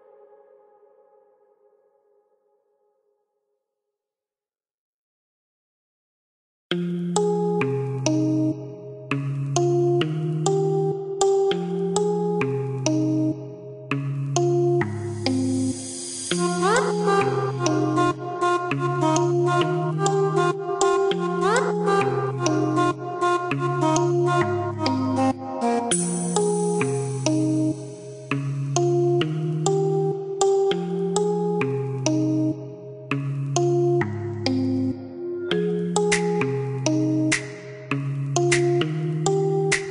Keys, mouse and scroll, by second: 1.8 click, 5.0-5.6 scroll up 1, 7.7 click, 9.6 click, 10.8 click, 12.7 click, 15.8 KP_0, 16.0 KP_Decimal, 16.3 KP_1, 16.8 KP_Enter, 18.4 middle click, 20.8 click, 24.3 click, 25.2 middle click, 26.4-26.8 scroll up 1, 27.6 middle click, 29.4 scroll down 1, 30.0 middle click, 32.0 middle click, 34.4 click, 35.0 click, 36.2 space, 37.0 click.